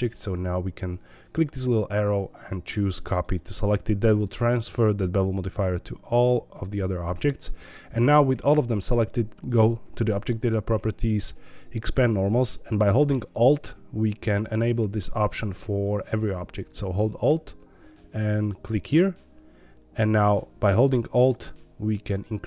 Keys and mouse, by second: 1.2-3.3 drag, 11.4 click, 18.3 alt+click, 21.3-22.4 alt+drag.